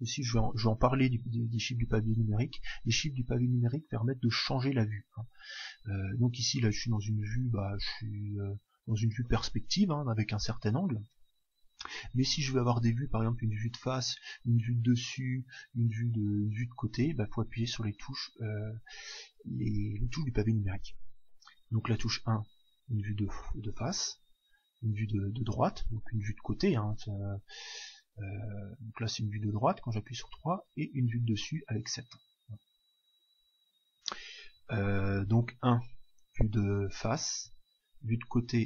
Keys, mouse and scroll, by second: 7.6-11.8 middle drag, 21.8 KP_1, 24.0 KP_3, 30.6 KP_7, 32.4 KP_9, 35.6 KP_1, 37.4 KP_3.